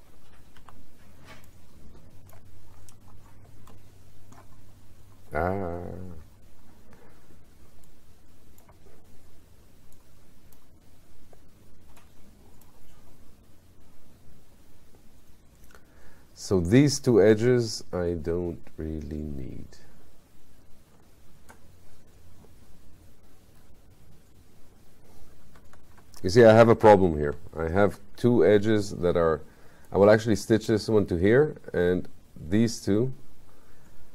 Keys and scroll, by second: 25.8 ctrl+y.